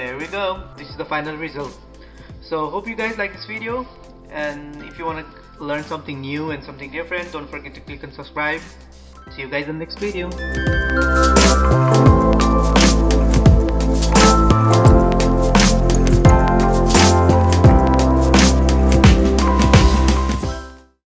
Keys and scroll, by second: 0.9 ctrl+=.